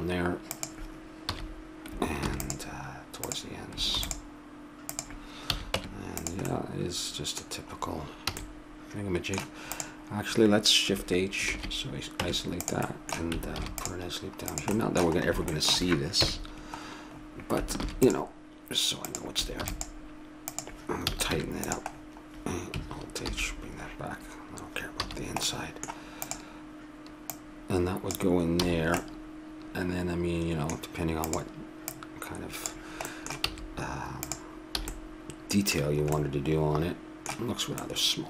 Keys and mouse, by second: 1.2 a, 2.3 ctrl+r, 3.9 ctrl+r, 5.5 a, 5.8 Tab, 6.5 middle click, 8.3 a, 9.8-11.4 drag, 11.4 shift+h, 12.2 Tab, 12.9 middle click, 13.5 ctrl+r, 16.2 KP_Decimal, 17.8 ctrl+r, 19.6 ctrl+r, 21.0 a, 21.3 Tab, 23.2 alt+h, 25.0 a, 25.4 middle click, 26.2-28.2 right drag, 28.6 a, 31.3-33.3 right drag, 33.1 click, 33.5 s, 34.8 a, 35.7-38.2 middle drag.